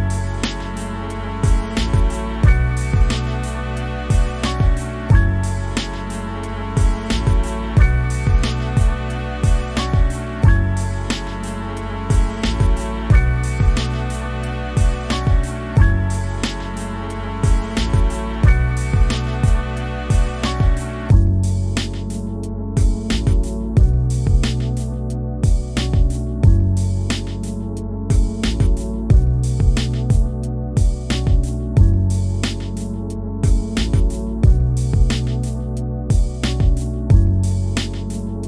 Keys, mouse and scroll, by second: 0.2 shift+middle click, 0.3 scroll up 1, 0.5-3.1 middle drag, 3.1-3.5 scroll down 2, 3.5-4.7 middle drag, 4.9 scroll up 2, 5.0 middle click, 5.2 click, 5.5 scroll down 2, 5.6 middle click, 6.0 scroll up 1, 6.2-8.0 drag, 8.0 shift+middle click, 8.2 click, 8.9 scroll down 1, 9.1 click, 9.7 ctrl+z, 9.9 ctrl+z, 10.2 click, 10.7 middle click, 11.4 scroll up 1, 11.6 middle click, 11.8-16.0 drag, 16.7 shift+middle click, 16.8 f, 17.0 middle click, 17.1 shift+click, 17.9 shift+middle click, 18.0 scroll up 1, 18.2 shift+click, 18.8 scroll down 2, 18.9 shift+middle click, 19.0 scroll up 1, 19.1 shift+click, 19.9 middle click, 20.1 shift+click, 20.3 shift+middle click, 20.7 shift+click, 21.0-22.1 shift+middle drag, 22.3 middle click, 23.1 scroll up 1, 23.3 f, 23.5 middle click, 23.8 scroll down 2, 24.0 middle click, 24.7 scroll down 1, 24.9 middle click, 25.4 scroll up 7, 25.6 click, 25.9 scroll down 1, 26.1-27.9 drag, 27.9 scroll down 1, 28.2 shift+middle click, 28.3 scroll up 1, 28.4 click, 29.4 scroll down 1, 29.5 middle click, 29.6 scroll up 2, 29.8 click, 30.5 scroll down 2, 30.6 middle click, 31.2 scroll up 1, 31.4 click, 31.9 scroll down 1, 32.3 shift+middle click, 32.8 scroll up 1, 33.0 click, 33.2 shift+middle click, 33.4 click, 33.7 scroll down 1, 33.8 shift+middle click, 33.9 scroll up 2, 34.1 click, 34.7 scroll down 1, 34.8-36.0 middle drag, 36.0 scroll up 1, 36.2-37.3 drag, 37.3 scroll down 1, 37.3 shift+middle click, 37.5 click, 37.8 scroll down 2, 38.1 scroll up 1, 38.3 shift+click.